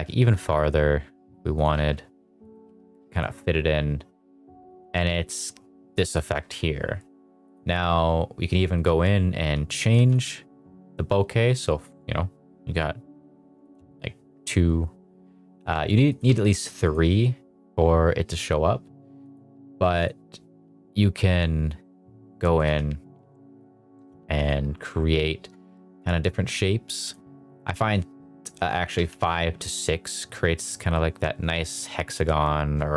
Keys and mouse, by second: 0.2 g, 1.5 click, 1.9 s, 2.6 g, 3.1 click, 7.5 click, 8.7-10.1 drag, 13.6 click, 16.1 click, 19.2 click, 22.6-24.4 drag, 27.0-29.2 drag.